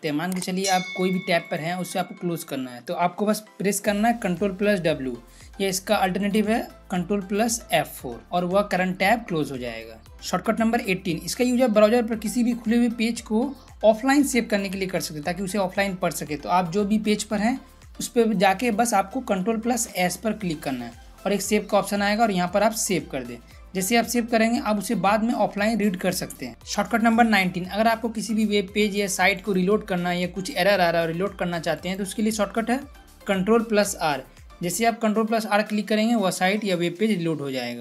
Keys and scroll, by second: 4.7 ctrl+w, 8.2 ctrl+F4, 19.5 ctrl+s, 33.9 ctrl+r.